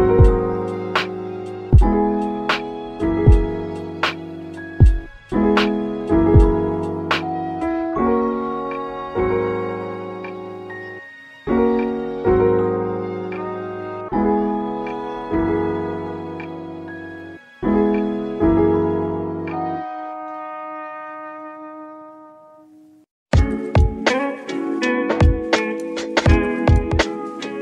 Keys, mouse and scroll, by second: 0.1-1.1 middle drag, 1.1 click, 2.8-4.4 drag, 14.1 click, 15.1 click, 16.4 click, 16.9-17.5 scroll down 4, 17.5-18.0 scroll down 1, 18.0 click, 22.6 click, 23.3 click.